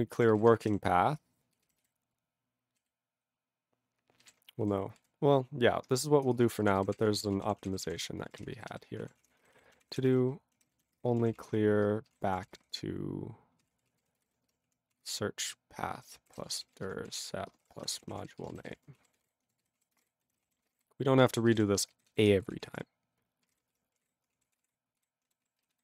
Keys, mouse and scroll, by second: 0.0-1.3 typing, 1.8 alt+b, 1.8 alt+b, 5.5 ctrl+e, 6.2-19.3 typing, 8.7 ctrl+b, 9.0 ctrl+a, 9.2 ctrl+o, 9.2 Tab, 19.7 ctrl+s, 19.8 ctrl+a, 19.9 ctrl+space, 20.0 ctrl+e, 20.0 ctrl+g, 20.3 ctrl+n, 20.4 ctrl+n, 20.4 ctrl+a, 20.6 ctrl+space, 20.7 ctrl+p, 20.7 ctrl+g, 21.2 ctrl+space, 21.3 ctrl+a, 21.5 ctrl+g, 21.5 ctrl+e, 21.6 ctrl+n, 21.9 ctrl+b, 22.1 ctrl+b, 22.3-24.8 typing, 25.0 ctrl+g, 25.5 ctrl+s, 25.6 ctrl+b, 25.7 ctrl+b.